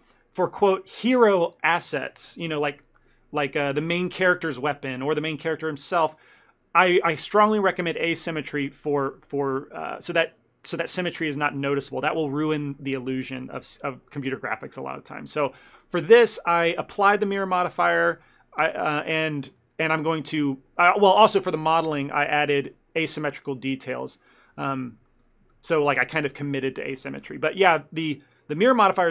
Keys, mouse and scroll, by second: 16.1 middle click, 19.4 shift+middle click, 19.7 ctrl+middle click, 21.5-22.1 scroll up 1, 22.1 scroll up 2, 22.2 shift+middle click, 22.8 scroll up 2, 23.9-24.8 scroll down 7, 24.6 middle click, 25.2 shift+middle click, 25.6 ctrl+middle click, 27.3 middle click.